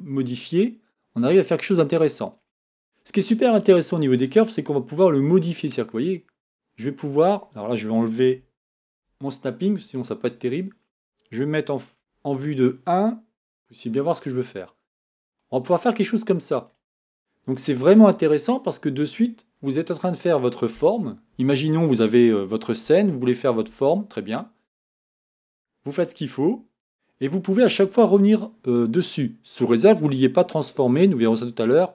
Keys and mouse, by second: 8.8 shift+Tab, 12.0 KP_1.